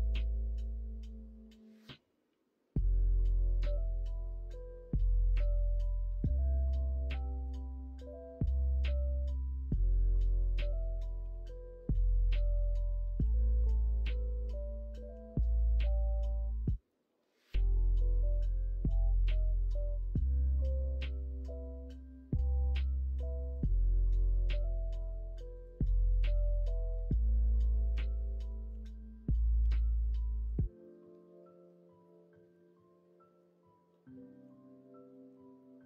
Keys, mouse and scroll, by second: 6.4-7.5 middle drag, 8.1 middle click, 10.1 middle click, 11.2 3, 15.1 l, 15.7 middle click, 16.4 middle click, 16.9 middle click, 17.7 middle click, 18.3 s, 23.7-25.2 middle drag, 25.5 click, 26.8 middle click, 28.6 click, 28.7 ctrl+z, 29.6 e, 30.9-32.6 middle drag, 33.2 middle click, 34.3 l, 35.5 middle click.